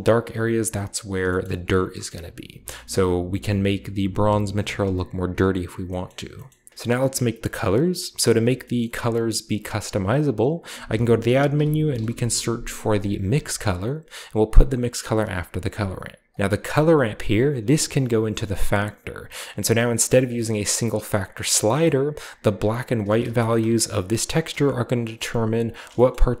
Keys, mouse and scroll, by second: 0.0-1.2 scroll down 4, 1.2-1.5 shift+middle drag, 1.7-5.0 shift+scroll down 2, 5.0 click, 6.5-8.5 scroll up 2, 8.7-9.6 middle drag, 10.8-12.0 typing, 13.4 click, 15.2 drag, 15.6 drag, 17.9-20.4 drag, 21.8-23.1 middle drag, 23.2 ctrl+shift+click, 25.5 ctrl+shift+drag, 26.0 middle click, 26.0-26.4 scroll up 1.